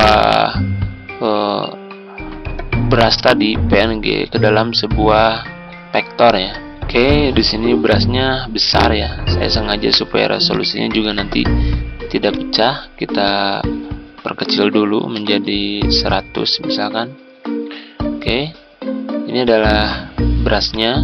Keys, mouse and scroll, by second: 6.6 Tab, 7.5-8.2 scroll down 1, 8.2-8.8 scroll up 1, 8.8-14.5 drag, 14.7-15.8 typing, 16.1 Return, 18.0 F4, 19.4-20.5 drag, 20.4 z.